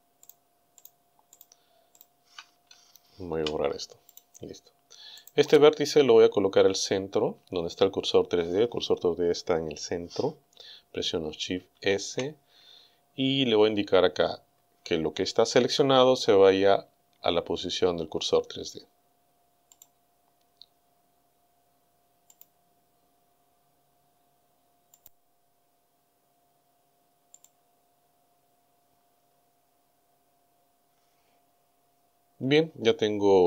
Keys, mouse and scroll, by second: 0.3 shift+right click, 0.8 shift+right click, 1.4 shift+right click, 2.0 shift+right click, 3.3 Delete, 4.1 click, 5.2 right click, 11.7 shift+s, 19.7 click, 22.4 click, 25.0 click, 27.3 click.